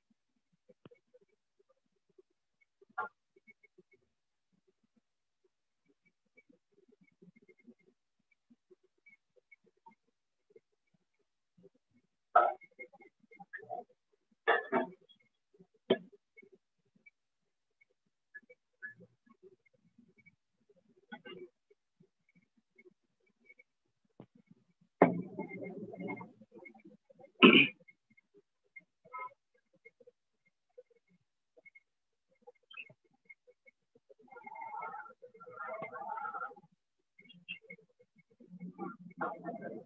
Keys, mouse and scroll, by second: 1.5 alt+click, 2.5 click, 3.5 alt+click, 4.5 shift+click, 5.5 shift+click, 6.6 shift+click, 7.5 alt+click, 9.5 click, 11.5 alt+click, 12.5-16.6 alt+click, 13.2-14.0 typing, 14.5 click, 15.5 click, 16.5 click, 17.5 click, 18.5 click, 19.5 click, 20.5 click, 21.5 click, 23.5 click, 25.5 click, 30.5 click, 31.5 alt+click, 32.5 right click, 35.5 right click, 36.5 alt+click, 37.5 shift+click, 39.5 alt+click.